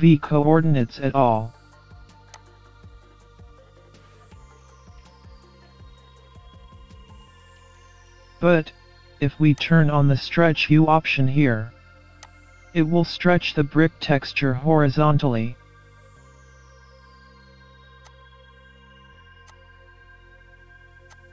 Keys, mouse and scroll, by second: 0.3 middle click, 2.4 click, 6.2 scroll up 3, 6.5 middle click, 9.6 click, 10.6 scroll down 2, 10.9-11.3 scroll up 1, 12.3 click, 14.9-15.2 scroll up 2, 15.2 middle click, 16.2 scroll up 1, 16.8 middle click, 18.0 click, 19.4 click, 21.1 click.